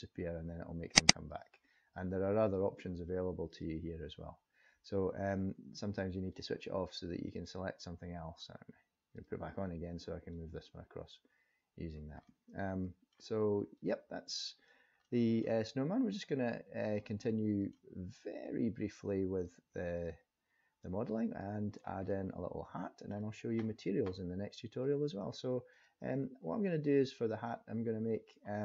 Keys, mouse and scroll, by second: 0.9 click, 1.4 click, 2.5 click, 6.3 click, 7.3 click, 9.2 click, 10.3 click, 12.2 middle click, 13.8 click, 15.0 middle click, 17.3 middle click, 18.4 click, 20.0 click, 20.8 click, 21.7-22.1 scroll down 2, 22.1 middle click, 24.7 click, 25.7 click.